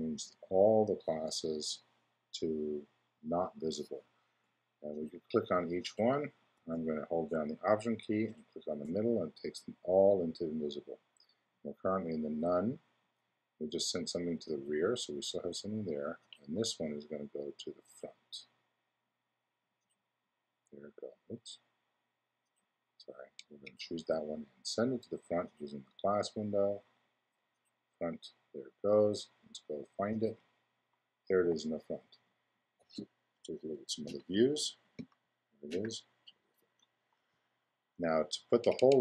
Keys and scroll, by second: 34.0 i.